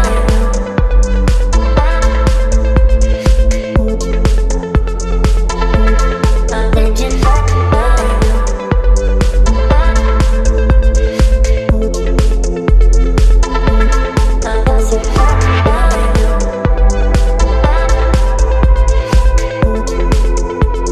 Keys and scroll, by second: 0.1 space.